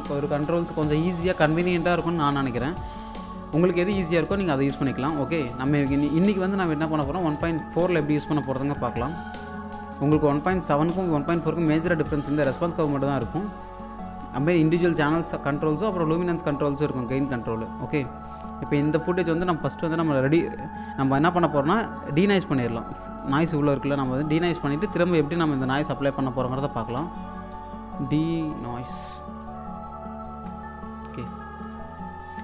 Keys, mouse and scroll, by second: 5.9 alt+Num_Lock, 5.9-6.2 scroll up 1, 6.2 alt+click, 6.4-6.8 scroll up 1, 6.8 click, 7.3 shift+x, 7.6-8.4 shift+scroll down 2, 9.4 click, 9.8 scroll down 1, 10.2-14.5 alt+drag, 18.0 click, 18.8 1, 19.4-20.2 scroll up 1, 20.7-21.5 scroll up 1, 23.5 click, 24.8 Tab, 26.4-29.0 typing, 29.4 click, 30.8 click.